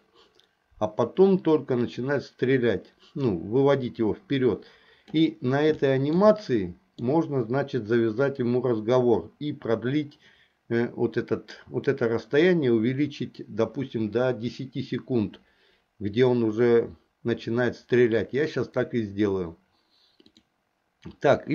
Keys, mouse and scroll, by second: 5.9 shift+middle click, 6.4 middle click, 11.7-18.3 drag, 20.4 click.